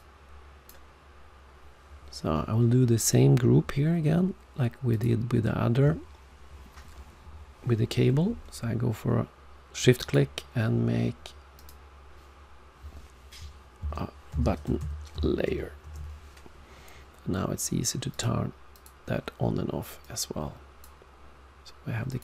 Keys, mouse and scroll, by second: 4.9 shift+click, 10.0 right click, 11.5 click, 18.1 click, 18.7 click, 20.0 click, 22.1 click.